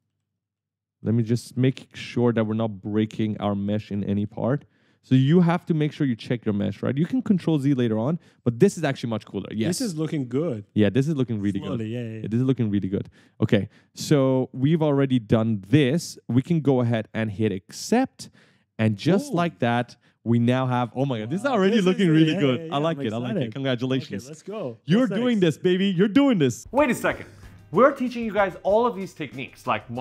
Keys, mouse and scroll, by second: 0.0-7.2 typing, 0.1 right click, 1.3 scroll down 1, 10.1-15.6 typing, 14.1 right click, 18.0 click, 19.0 right click, 19.1-20.8 typing.